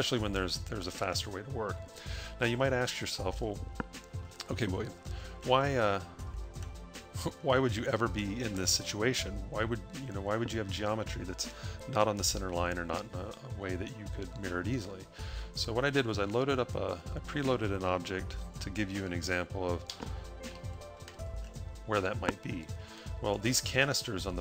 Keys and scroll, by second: 2.3 a, 19.7 0, 20.5 a.